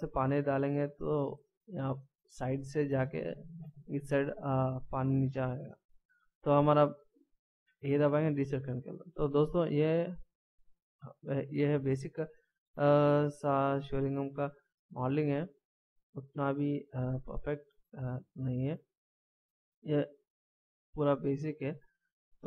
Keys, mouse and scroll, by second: 0.0 scroll down 1, 7.6 a, 9.2 scroll down 1, 12.5 middle click.